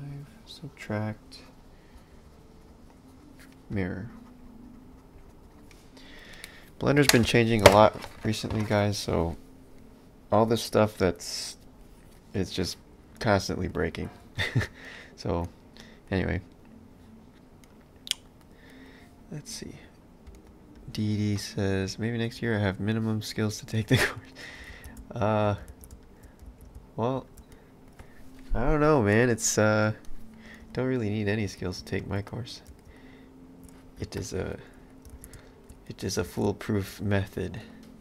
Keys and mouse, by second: 11.8 middle click, 20.3 space, 21.4 middle click, 24.6 space, 27.5 middle click, 31.5 s, 32.3 middle click, 32.7 space, 34.6 middle click, 35.1 space, 35.9 middle click, 36.2 space, 37.1 middle click.